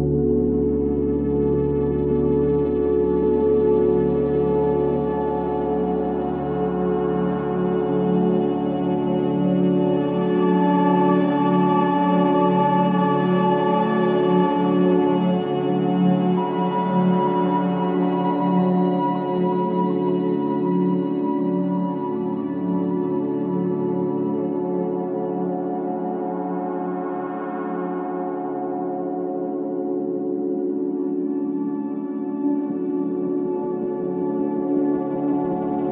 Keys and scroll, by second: 0.2 ctrl+z, 2.3 ctrl+q, 3.1 F2, 13.3 space, 30.1 space, 30.4 F3, 31.2 Escape, 31.4 F2.